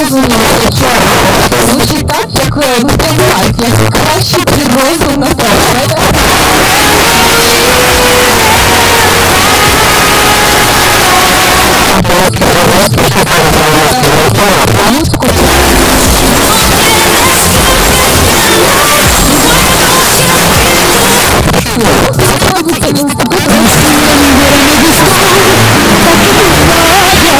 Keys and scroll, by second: 0.3 Up, 0.4 Up, 0.5 Up, 1.0 Up, 1.4 Return, 11.8 Page_Down, 21.2 Page_Down.